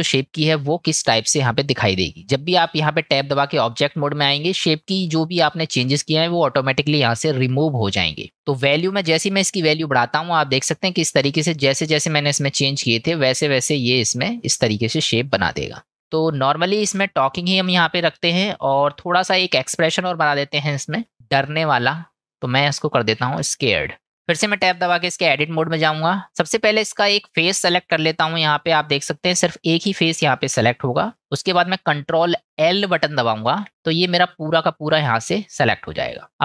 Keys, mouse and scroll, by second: 16.0-17.6 middle drag, 18.4-23.5 middle drag, 23.5 shift+click, 24.1 Tab, 24.7 Tab, 26.3 click, 29.0-30.0 middle drag, 30.2 shift+middle click, 33.5 ctrl+l.